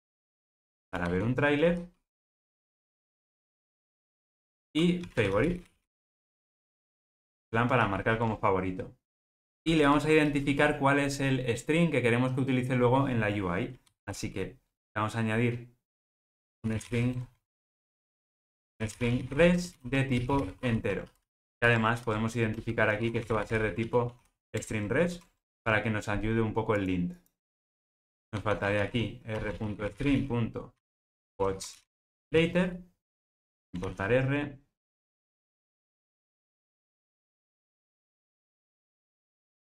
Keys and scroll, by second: 24.5 Return.